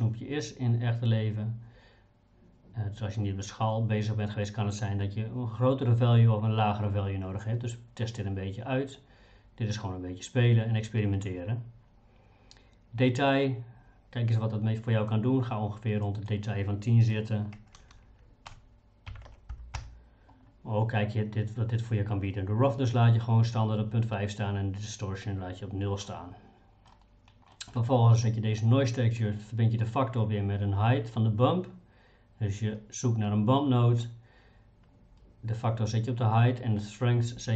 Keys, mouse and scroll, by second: 15.1-19.8 drag, 17.9 BackSpace, 18.5 BackSpace, 26.1 middle click, 27.5 middle click.